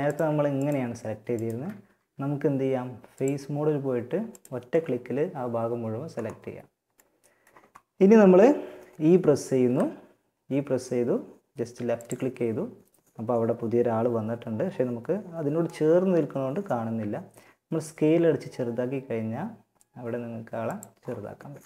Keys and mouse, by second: 1.0 a, 2.3-3.9 drag, 3.9-7.1 middle drag, 8.8 e, 17.0 s.